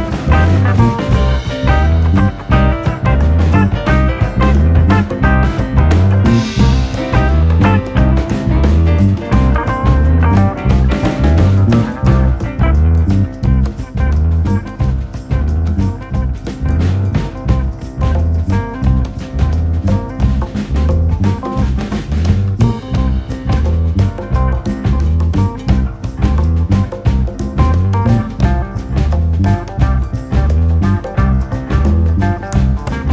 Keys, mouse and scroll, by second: 0.7 click, 2.1 click, 2.5 l, 2.8 click, 3.6 click, 4.0 l, 4.3 click, 5.8 KP_1, 6.2 scroll up 2, 6.6 r, 7.5 click, 7.9 l, 8.3 r, 9.2 alt+/, 9.2 scroll down 3, 9.4 middle click, 10.0 Tab, 10.2 click, 10.3 scroll down 1, 10.5-11.5 middle drag, 11.6 scroll up 1, 11.8-13.0 shift+middle drag, 13.7 scroll down 2, 13.9-15.0 shift+middle drag, 15.3 click, 16.6 KP_3, 20.4 ctrl+a, 20.9 click, 21.2-21.7 drag, 21.7 KP_Enter, 22.3-23.4 drag, 24.4 KP_3, 25.3 KP_1, 26.1 shift+d, 27.3 click, 28.3 click, 28.6 click, 29.5 drag, 29.8 click, 30.3 drag, 30.9-31.5 drag, 31.5 r, 32.6 click, 33.0 r.